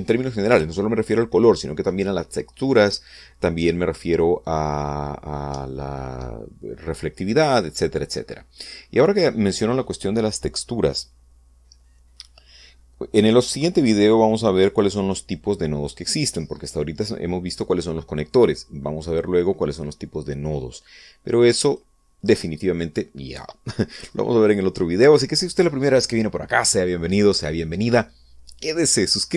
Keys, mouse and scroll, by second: 22.4 click, 22.9 click.